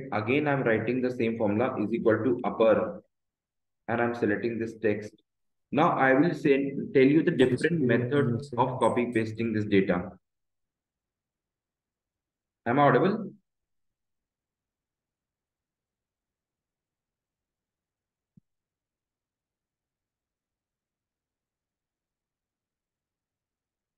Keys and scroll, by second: 0.9 Down, 1.5 Up, 3.5 shift+9, 3.9 Left, 4.9 shift+0, 5.5 Return, 5.9 Up.